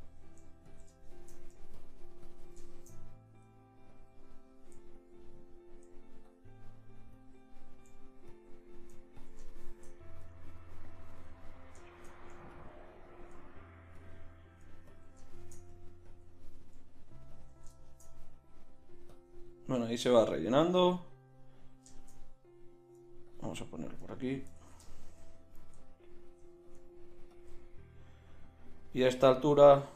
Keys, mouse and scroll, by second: 2.6-5.4 middle drag, 8.7 click, 9.7-10.6 middle drag, 10.6-11.3 drag, 23.3-24.6 drag, 24.6 ctrl+z, 26.1 click, 28.1-29.1 drag.